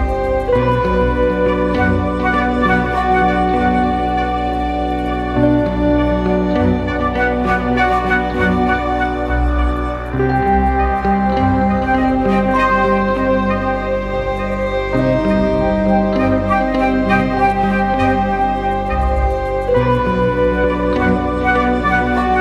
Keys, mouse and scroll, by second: 5.8-7.5 typing, 10.2 typing, 16.6 double click, 17.8-20.8 typing.